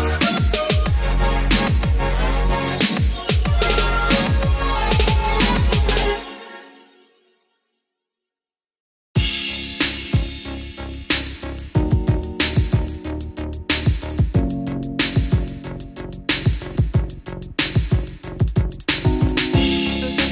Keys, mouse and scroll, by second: 0.6-11.8 drag, 12.3-15.2 scroll down 1, 16.3 click, 17.7-18.9 scroll up 1, 19.6 scroll down 1.